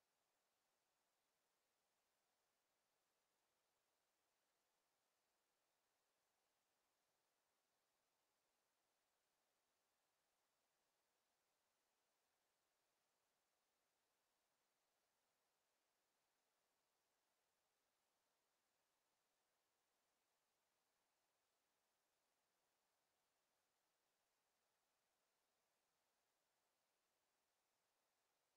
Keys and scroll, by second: 1.1 ctrl+z, 10.0 ctrl+z.